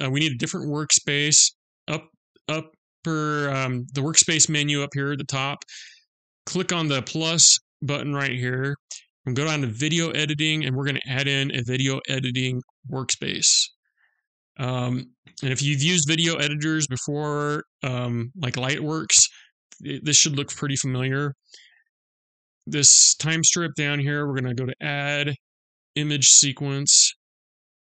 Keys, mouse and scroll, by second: 7.5 click.